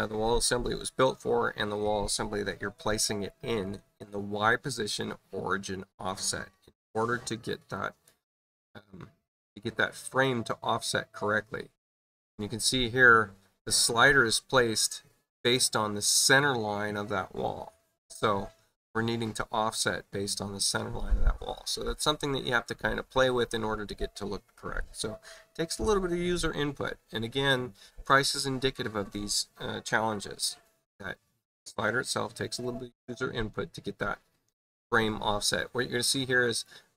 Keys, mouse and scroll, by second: 7.7 click, 36.4 right click.